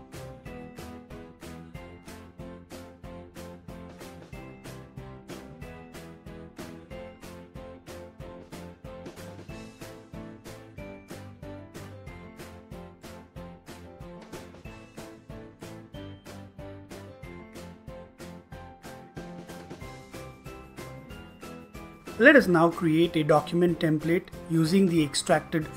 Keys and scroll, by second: 0.0-5.3 typing, 6.4-7.9 typing, 9.6-13.1 typing, 14.9-15.7 typing.